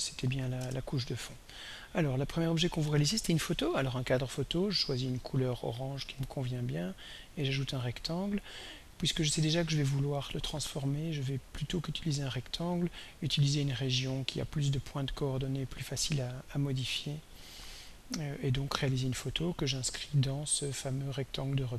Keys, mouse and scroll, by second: 0.0-0.9 typing, 1.6 click, 5.3 click, 7.3 click, 13.6 click, 15.0 click, 20.2-21.7 drag.